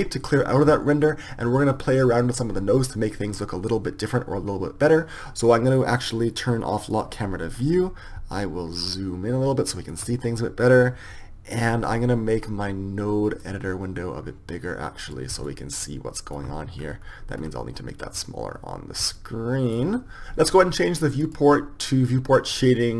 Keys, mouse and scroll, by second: 7.0-9.0 drag, 9.7 middle click, 13.6 click, 14.2-15.5 drag, 15.6-16.7 middle drag, 16.7 click, 17.1 middle click, 17.2-20.2 middle drag, 20.2-22.4 drag.